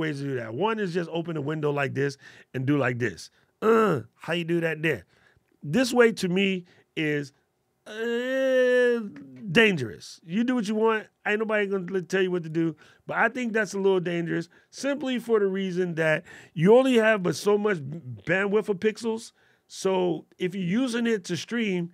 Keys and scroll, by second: 16.8 alt+super+8.